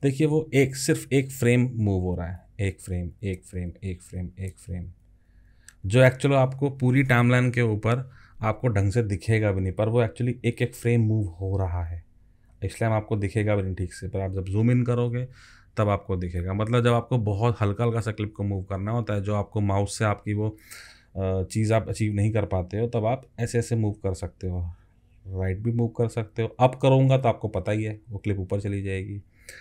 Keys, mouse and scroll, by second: 2.4 alt+Left, 3.2 alt+Left, 3.7 alt+Left, 4.2 alt+Left, 4.7 alt+Left, 5.0 alt+Left, 5.3 alt+Left, 5.5 alt+Left, 5.7 alt+Left, 5.8 alt+Left, 6.1 alt+Left, 6.3 alt+Left, 9.8 alt+Left, 10.6 alt+Left, 11.2 alt+Left, 11.9 alt+Left, 12.5 alt+Left, 13.1 alt+Left, 13.8 alt+Left, 23.2 alt+Left, 23.6 alt+Left, 24.0 alt+Left, 25.2 alt+Right, 25.4 alt+Right, 25.7 alt+Right, 25.9 alt+Right, 26.2 alt+Right, 27.6 alt+Up, 28.8 alt+Down.